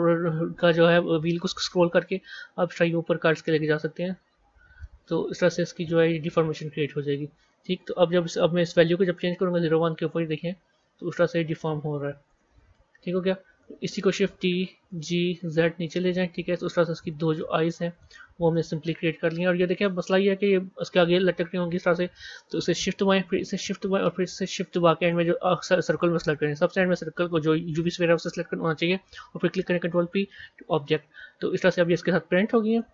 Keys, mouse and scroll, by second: 6.5 Tab, 8.5-11.6 drag, 12.6-13.5 scroll down 4, 13.5-14.3 scroll down 2, 14.3 shift+d, 18.4-21.4 middle drag, 21.6 click, 23.4 shift+click, 24.9 shift+click, 29.8 ctrl+p, 32.6 click.